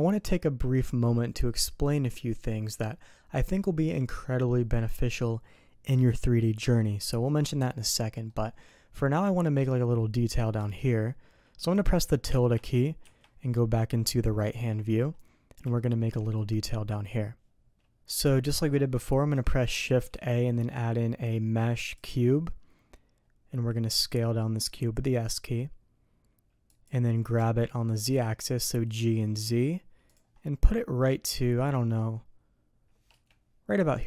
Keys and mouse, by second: 8.3 click, 8.5 middle click, 13.0 `, 15.7 shift+click, 18.0 click, 23.9 s, 27.3 g, 31.2 s.